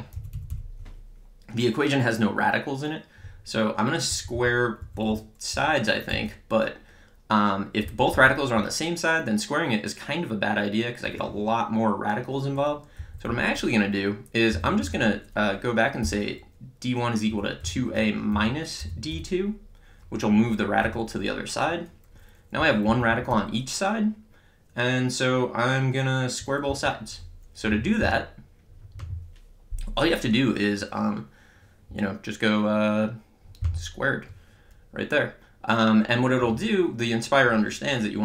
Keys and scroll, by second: 0.2 Right, 4.1 Left, 4.8 Down, 5.6 Up, 6.1 Down, 7.9 Up, 8.2 Left, 8.6 Right, 13.0 Down, 14.6 d, 14.9 1, 16.0 =, 17.3-19.6 typing, 20.9 Return, 22.6 Up, 22.9 Left, 23.1 Right, 26.7 Down.